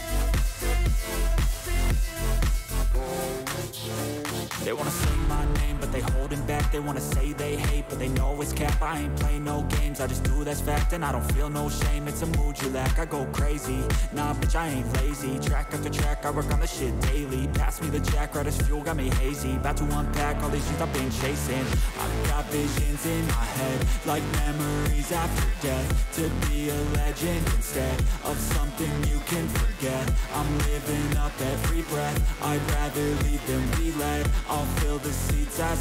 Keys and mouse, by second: 1.1 shift+click, 3.0 alt+shift+click, 4.1 alt+shift+click, 4.6 alt+shift+click, 5.5 click, 7.0 alt+shift+click, 7.9 alt+shift+click, 9.0 alt+shift+click, 10.4 alt+shift+click, 11.7 click, 12.6 click, 16.0 click, 16.6 click, 18.5 click, 20.7 shift+click, 21.6 shift+click, 22.4 shift+click, 24.0 click, 27.1-29.1 drag, 34.0-35.6 drag.